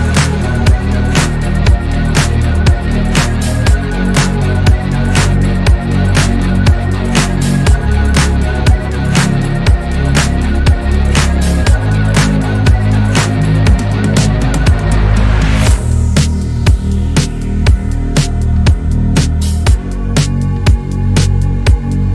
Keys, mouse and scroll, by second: 3.5 Tab, 3.7 scroll down 1, 3.8-4.5 middle drag, 4.5-5.1 right drag, 5.1 scroll up 1, 5.3 Tab, 5.6-7.7 middle drag, 7.7 click, 8.5-10.0 middle drag, 10.0 click, 10.5 middle click, 10.9 2, 11.2 click, 11.5 shift+click, 11.8 shift+click, 12.0 shift+click, 12.2 shift+click, 12.4 shift+click, 12.7 shift+click, 12.9 shift+click, 13.2 middle click, 13.8 shift+click, 14.8-16.0 shift+middle drag, 16.0 shift+click, 16.5 scroll down 1, 16.7 middle click, 17.4 shift+click, 17.7 middle click, 18.0 scroll down 1, 18.1 shift+middle click, 18.5-19.3 scroll up 2, 19.3 ctrl+b, 21.6 middle click.